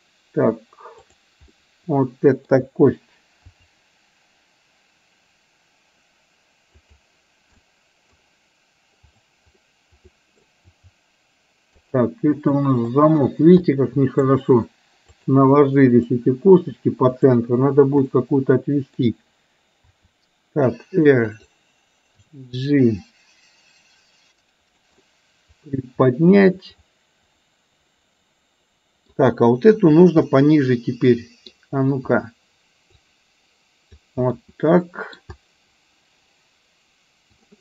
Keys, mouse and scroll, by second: 1.1 click, 1.7-2.7 middle drag, 4.1 r, 7.7 middle click, 9.2 click, 9.6 middle click, 11.1 r, 12.8 click, 13.7 middle click, 15.2 click, 15.8 middle click, 17.2 click, 18.2 middle click, 21.1 r, 23.6 g, 25.1-29.2 middle drag, 30.3-31.6 middle drag, 33.0-34.3 drag, 34.3-34.7 scroll up 1, 34.7-35.3 middle drag.